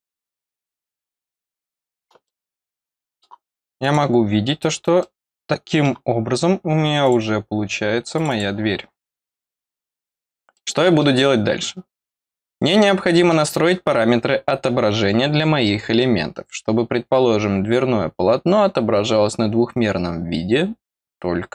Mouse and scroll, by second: 1.4 click, 2.2 middle click, 3.7 click, 4.2-4.8 scroll down 4, 4.9 middle click, 7.0 click, 8.1 click, 10.5 middle click, 12.5 click, 13.2 middle click.